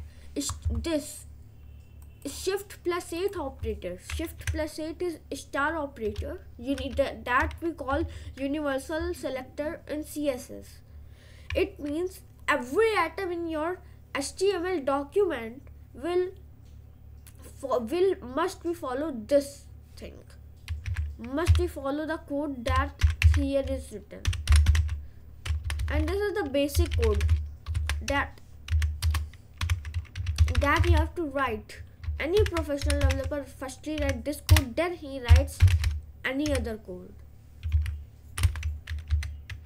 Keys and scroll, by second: 21.1-34.1 typing, 29.1 Return, 34.6 Return, 35.1-36.5 typing, 37.9 b, 38.6 BackSpace, 39.1 Down.